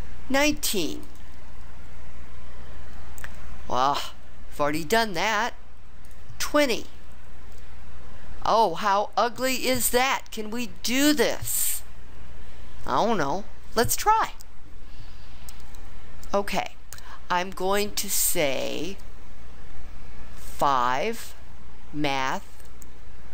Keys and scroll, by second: 20.5 5.